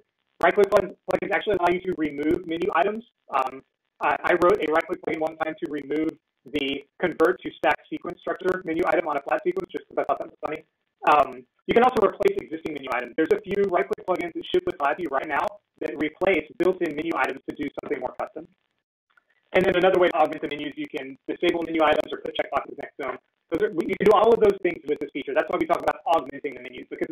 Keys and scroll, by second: 7.8 ctrl+e, 16.5 ctrl+e.